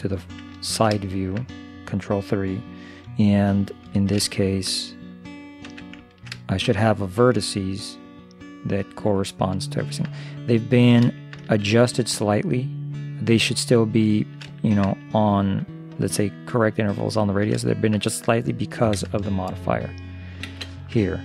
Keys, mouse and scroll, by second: 0.6-2.1 middle drag, 4.0-5.6 middle drag, 5.7 Tab, 6.0 middle click, 9.8-13.2 middle drag, 14.1-16.3 middle drag, 17.3 middle click, 19.0 shift+space, 20.5 shift+space, 21.1-21.2 middle drag.